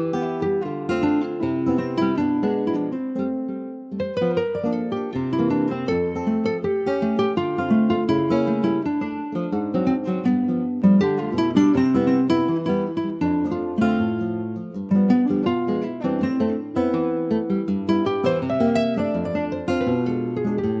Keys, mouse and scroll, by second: 0.1 ctrl+a, 1.3 click, 2.0 shift+click, 3.3 ctrl+shift+b, 4.8-6.0 middle drag, 6.0 click, 6.6 ctrl+s, 7.2 click, 8.8 click, 9.6 click, 10.4 click, 11.5 Delete, 12.2-12.6 scroll up 2, 12.8 ctrl+s, 13.0 click, 13.4 middle click, 14.2-14.9 scroll up 3, 14.4 Tab, 15.0 shift+middle click, 15.7 click, 16.5 Tab, 17.1-19.1 drag, 19.1 1, 19.5-20.8 drag.